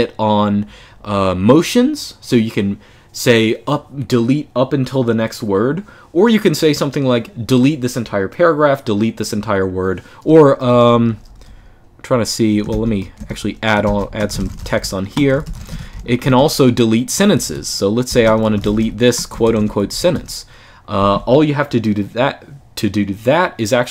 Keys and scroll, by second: 10.1-20.2 typing, 17.8 Escape, 23.8-23.9 typing.